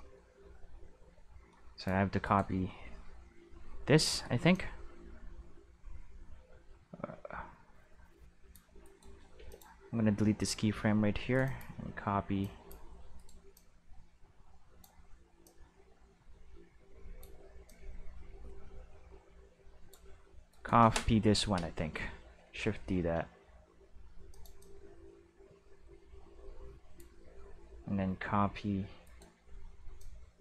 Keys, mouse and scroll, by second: 2.2 right click, 4.5-8.5 drag, 8.8 right click, 9.3 x, 9.4-11.1 drag, 11.3 right click, 11.4 click, 12.4 click, 13.1 right click, 13.5-14.8 drag, 15.4-17.2 drag, 17.6-19.9 drag, 20.5 right click, 22.4 shift+d, 24.3-26.9 drag, 29.0 right click, 29.9 click, 29.9 right click.